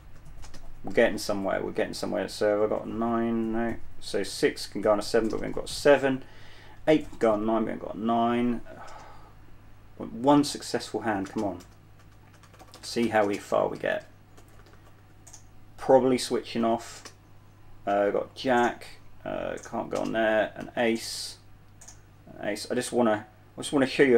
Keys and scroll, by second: 0.0-1.3 typing, 3.8 typing, 5.6 typing, 7.5 typing, 9.2 typing, 10.8-15.6 typing, 17.2 typing, 20.9-22.4 typing.